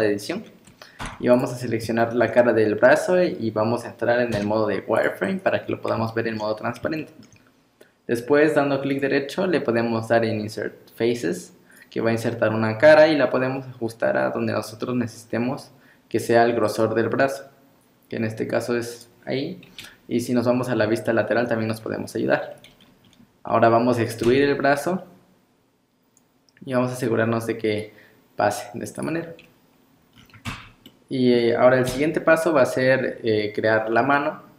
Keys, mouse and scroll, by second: 0.2-1.0 scroll up 1, 1.0 3, 1.3 click, 1.7 scroll up 1, 2.0 shift+middle click, 4.4 z, 5.5-6.0 scroll up 3, 6.1 shift+middle click, 6.6 scroll up 1, 7.0 shift+middle click, 8.9 right click, 19.7 KP_3, 20.6 scroll up 1, 21.1 shift+middle click, 21.8-22.8 scroll down 3, 24.2 e, 30.1-30.5 scroll down 6, 30.5 Tab, 30.9 middle click, 31.9 KP_1, 33.0 scroll down 3, 33.7 scroll up 5.